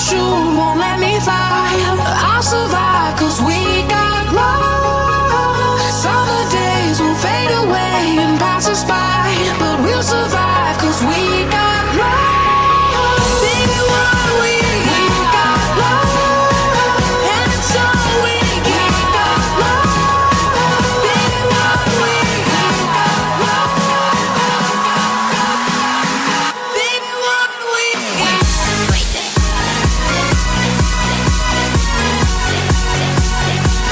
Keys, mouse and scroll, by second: 0.3 KP_7, 0.4 middle click, 0.7 shift+d, 1.4 middle click, 1.8 g, 1.8 shift+d, 3.0 shift+d, 3.1 right click, 3.9 click, 3.9 right click, 4.2 Tab, 4.3 middle click, 4.4-6.8 typing, 4.6 Tab, 4.7 right click, 4.8 Tab, 5.2 Tab, 5.2 right click, 5.4 Tab, 5.4 click, 5.5 Tab, 5.6 Tab, 6.0 right click, 6.4 Tab, 6.6 right click, 6.7 Tab, 7.8 Tab, 7.8 right click, 7.9 Tab, 8.0 middle click, 8.2 g, 8.4 click, 8.6 Tab, 8.6 right click, 8.7 g, 9.0 right click, 9.1 Tab, 9.1 g, 9.2 g, 9.5 Tab, 9.5 right click, 9.9 Tab, 9.9 click, 9.9 right click, 10.0 Tab, 10.2 ctrl+s, 10.4 KP_1, 10.7 right click, 10.8 ctrl+s, 10.8 click, 11.2 ctrl+s, 11.2 right click, 11.4 Tab, 11.5-17.9 typing, 11.9 click, 12.0 ctrl+z, 12.7 middle click, 13.8 right click, 14.0 middle click, 14.2 ctrl+z, 14.7 ctrl+z, 14.8 right click, 16.6 right click, 16.8 ctrl+z, 20.3 click, 20.3 KP_7, 20.6 middle click, 21.0 click, 21.1 Tab, 21.2 right click, 21.2 g, 21.4 g, 21.6 right click, 21.8 Tab, 21.8 click, 22.0 ctrl+z, 22.0 s, 22.3 click, 23.0 Tab, 23.1 ctrl+s, 23.5 Tab, 23.5 click, 23.6-33.9 typing, 25.0 click, 25.2 ctrl+z, 25.2-26.3 drag, 27.0 right click, 27.5 middle click, 28.3 middle click, 28.4 Tab, 28.4 right click, 28.6 Tab, 29.1 right click, 29.8 ctrl+KP_Add, 30.2 right click, 32.0 Tab, 32.4 ctrl+s, 32.6 Tab, 32.6 right click.